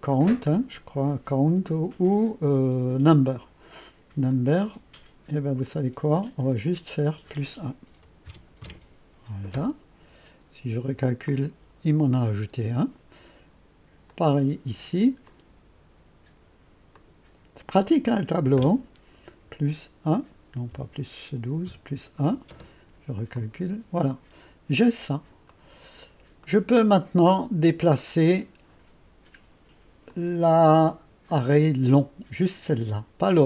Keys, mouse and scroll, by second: 0.7-1.4 drag, 1.7 click, 4.4 click, 5.7 click, 6.6 click, 8.0-8.3 typing, 8.7 Return, 11.3 click, 14.1-17.4 drag, 18.2 click, 18.2 typing, 19.2-21.3 typing, 21.7 Return, 23.4-24.6 drag, 25.1-25.4 scroll up 2, 25.1-26.5 typing, 25.6 right click, 26.0 right click, 26.5 right click, 27.1 right click, 27.4-28.1 right drag, 27.4-28.1 scroll up 1, 30.2 click.